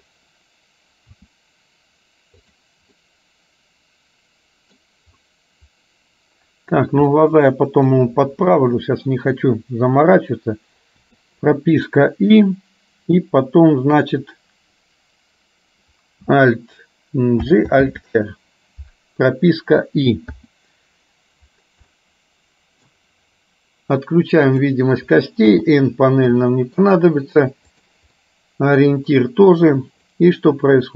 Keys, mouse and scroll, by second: 1.6 r, 3.1-4.9 middle drag, 7.2 middle click, 8.5 KP_3, 11.1 i, 12.6-14.2 drag, 17.6 alt+g, 18.0 alt+r, 20.5 i, 22.0-23.0 middle drag, 24.7 click, 25.5 n, 26.5 shift+middle click, 27.7 click, 28.4 middle click, 30.2-30.9 drag.